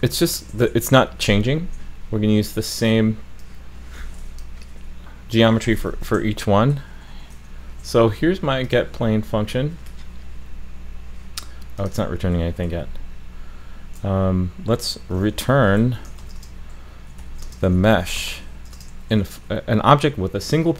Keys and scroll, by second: 7.3 alt+shift+f.